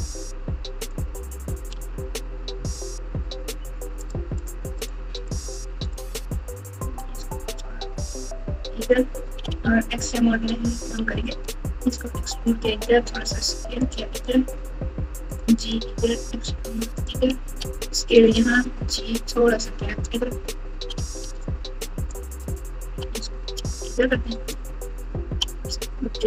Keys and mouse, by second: 1.7 g, 3.9 alt+click, 4.4 alt+click, 4.7 alt+click, 5.8 alt+click, 7.1 g, 9.5 alt+z, 10.2 click, 10.9 alt+z, 11.5 e, 12.9 s, 14.4 g, 15.8 e, 17.4 s, 18.4 g, 21.2 alt+z, 21.6 click, 22.8 g, 24.6 click, 25.4 r.